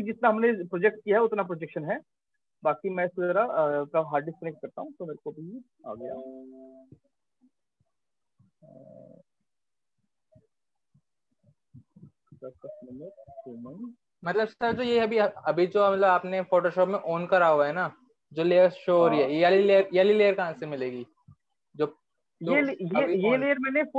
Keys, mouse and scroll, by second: 2.1 click, 2.3 click, 7.0 click, 9.0 click, 9.1 click, 9.6-10.2 scroll, 11.0 click, 11.1 click, 12.5 click, 12.8 click, 13.5 middle click, 13.7 middle click, 14.2 scroll, 14.9 scroll, 16.1-16.7 scroll, 20.8 scroll, 21.3 scroll.